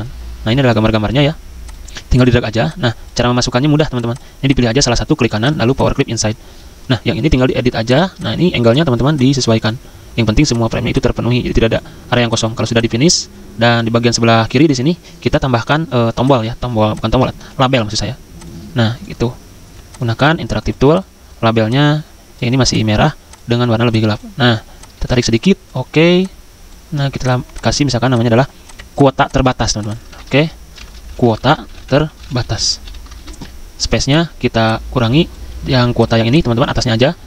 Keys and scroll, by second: 2.4 z, 30.1 ctrl+a, 30.8-35.4 typing.